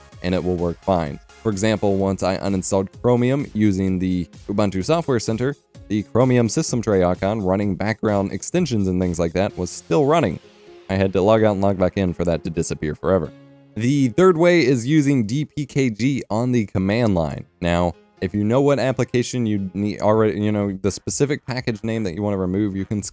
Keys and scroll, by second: 20.9 F12, 21.1-23.1 typing.